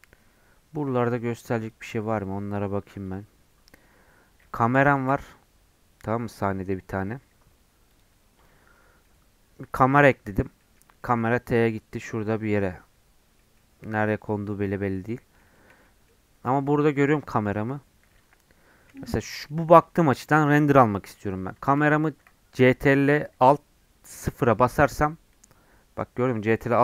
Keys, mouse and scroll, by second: 1.6-4.9 drag, 4.9 shift+a, 8.5 scroll down 4, 9.0-11.2 middle drag, 11.2-11.7 scroll up 9, 11.7 middle click, 12.1 scroll down 3, 12.9-13.2 scroll down 9, 13.4 middle click, 14.1 scroll up 5, 14.5 middle click, 14.8 scroll up 1, 15.0-19.3 middle drag, 19.3 scroll up 1, 19.5-24.2 middle drag, 24.2 ctrl+alt+KP_0.